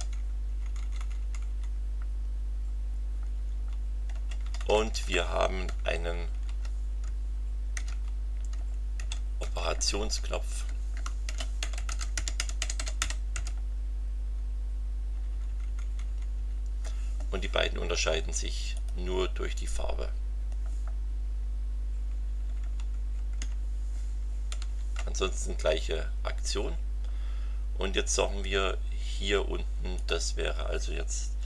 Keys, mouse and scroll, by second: 0.0-0.3 typing, 3.1 Down, 4.1 Return, 4.4 Up, 5.8 shift+Down, 7.7 ctrl+c, 7.9 ctrl+Down, 9.0 ctrl+v, 9.4 ctrl+Up, 10.2 ctrl+Right, 11.0-13.8 typing, 15.1 Delete, 18.7 click, 22.1 Down, 23.0 Left, 24.5 0, 24.6 Delete, 27.0-27.4 scroll down 2, 29.9 click.